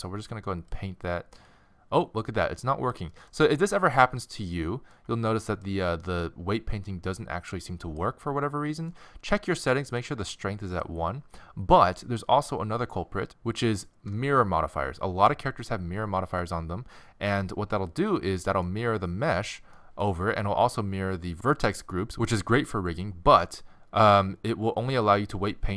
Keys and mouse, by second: 3.1-10.0 middle drag, 10.0-11.8 drag, 11.8-16.9 middle drag, 18.4-19.8 middle drag, 24.9-25.7 drag.